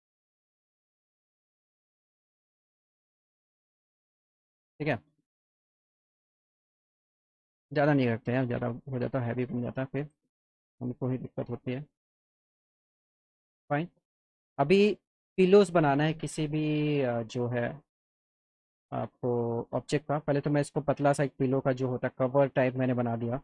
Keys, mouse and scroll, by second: 0.2 scroll down 2, 0.8 BackSpace, 1.5 click, 4.1 click, 5.9 F4, 6.4 click, 7.6 click, 8.4 Up, 9.6 click, 10.7 click, 11.3 click, 12.3 F3, 12.7 F4, 13.2 click, 13.6 middle click, 14.2 click, 14.6-15.6 alt+middle drag, 18.1-19.5 middle drag, 20.6-21.6 alt+drag.